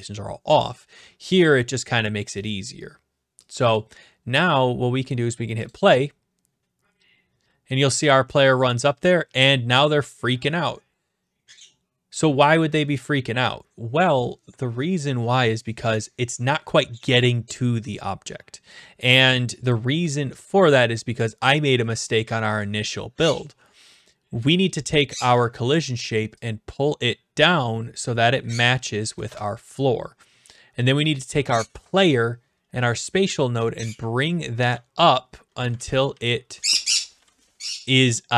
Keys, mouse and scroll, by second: 3.7 click, 4.3 scroll, 4.5 scroll down 5, 5.7 click, 19.7 click, 22.6 scroll, 24.5 click, 27.9 click, 28.6 click, 29.2 typing, 31.7 ctrl+s, 32.2 click, 34.4 click, 34.7 ctrl+z, 35.6 click, 35.8 ctrl+z, 36.1 d, 36.8 w, 37.6 q, 38.2-38.3 right drag.